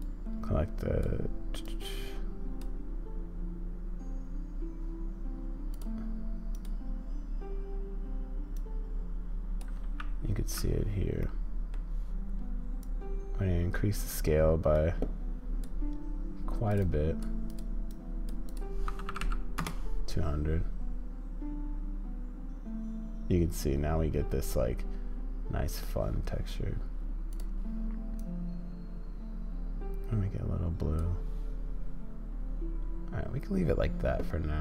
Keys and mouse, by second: 11.3 middle click.